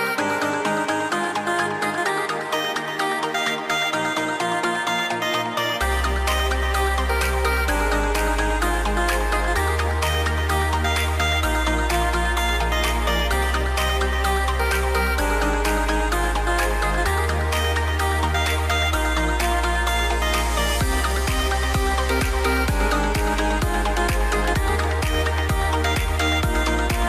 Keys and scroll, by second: 9.6 super+z, 11.8 super+z, 14.7 shift+m.